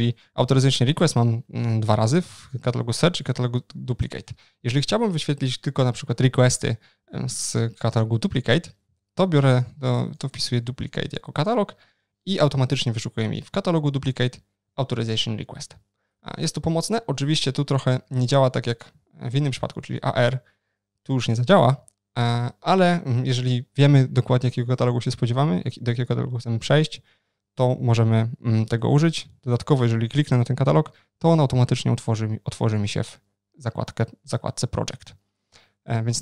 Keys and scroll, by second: 21.7 super+z.